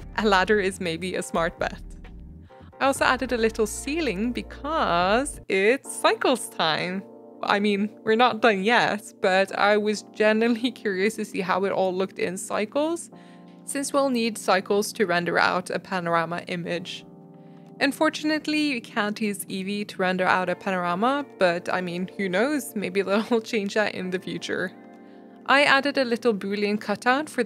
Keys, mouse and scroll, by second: 0.0 Delete, 0.1 Tab, 0.4 shift+click, 0.7 ctrl+j, 0.9 middle click, 1.0 scroll down 2, 1.3 KP_Divide, 1.5 middle click, 1.6-2.0 scroll down 5, 1.7 click, 1.7 middle drag, 2.0 shift+middle click, 2.2 scroll up 2, 2.3 scroll down 1, 2.4-3.7 shift+middle drag, 3.8 middle click, 4.2 click, 4.5 scroll down 3, 4.9-8.2 drag, 7.5 shift+middle click, 8.2 shift+middle click, 9.4 click, 9.7-11.5 shift+middle drag, 12.3 shift+middle click, 13.5 click, 13.7 g, 14.5 click, 14.9 click, 16.1 click, 16.9 click, 17.1 click, 17.3 click, 17.9 click, 20.0 click, 22.1 click, 24.5 KP_0, 25.2 click, 25.4 middle click, 26.9 click.